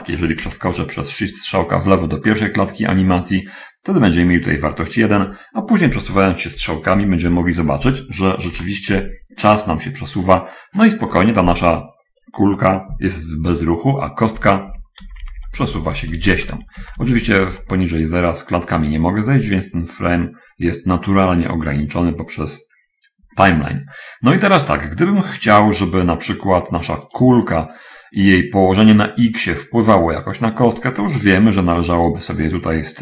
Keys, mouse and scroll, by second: 0.6 shift+Left, 6.6 Right, 7.4 Right, 8.9 Home, 9.9-10.5 scroll up 2, 14.8 Right, 15.1 Right, 15.4 Left, 18.5 Left, 27.5-32.0 drag, 32.0-32.6 scroll up 2, 32.6-33.0 scroll down 1.